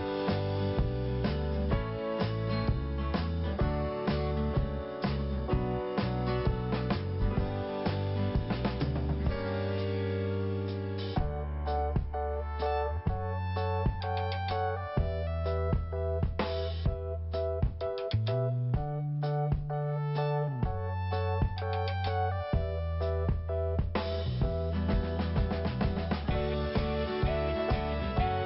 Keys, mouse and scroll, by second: 1.5-1.8 scroll down 1, 5.8-6.6 scroll up 1, 8.8 right click, 9.9 click, 11.0 click, 11.8 click, 13.2 scroll down 1, 14.7-15.4 scroll up 1, 16.0 click, 16.9 click, 17.4 right click, 18.8 click, 19.3 click, 21.1 click, 21.1 click, 21.8 click, 25.2 click, 27.3 click.